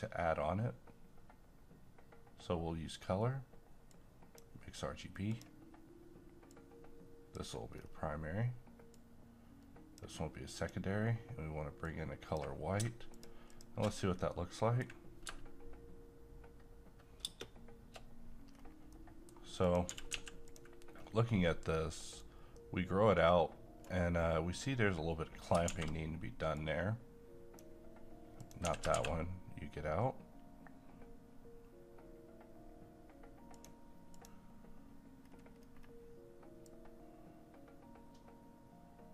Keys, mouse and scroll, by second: 3.8-7.7 drag, 7.7 scroll up 1, 8.9-13.1 drag, 14.3-17.2 middle drag, 17.2 shift+space, 18.6-18.9 scroll up 1, 18.9 middle click, 19.6 click, 19.9 typing, 20.5 click, 22.2-25.7 right drag, 25.7 shift+a, 26.6-28.4 drag, 28.6 typing, 33.5 click, 34.9-35.2 scroll up 1, 36.6-39.1 drag.